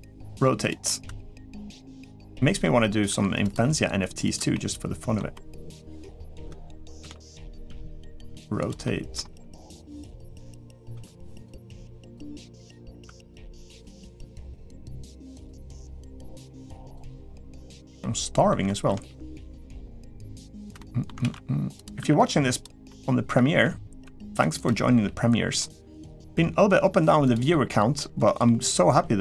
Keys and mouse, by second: 0.1 g, 0.6 middle click, 1.2 g, 2.0 middle click, 2.9 r, 3.4 g, 4.3 middle click, 5.1 middle click, 6.0 shift+middle click, 6.8 shift+d, 7.4 r, 8.1 g, 8.6 middle click, 9.1 g, 10.0 middle click, 10.7 s, 11.4 r, 12.1 middle click, 12.7 r, 13.1 g, 13.7 middle click, 14.3 g, 15.4 middle click, 16.1 g, 16.9 middle click, 17.8 middle click, 18.4 shift+middle click, 19.5 middle click, 20.1 g, 20.5 middle click, 21.0 shift+d, 21.8 r, 22.6 middle click, 23.8 r, 24.8 g, 26.0 g, 27.3 middle click, 28.2-29.2 middle drag.